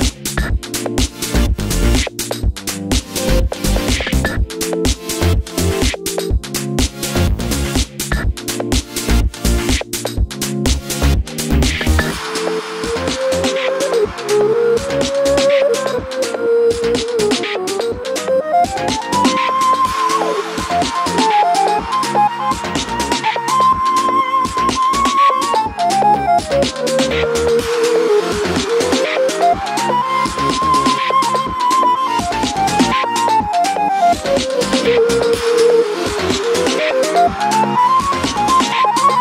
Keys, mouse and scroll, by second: 1.0 g, 5.6 ctrl+z, 10.8 click, 12.3 click, 17.9 s, 20.8 click, 22.9 g, 27.4 click, 29.8 g, 38.3-39.2 middle drag.